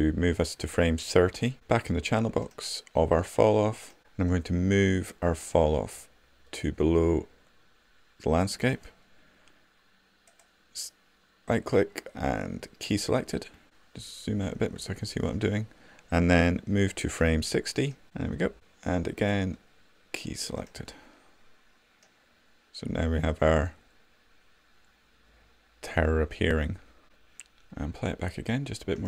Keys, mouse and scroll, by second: 10.2-13.0 right drag, 13.0 click, 19.3-20.8 drag, 20.8 right click, 20.9-22.3 drag.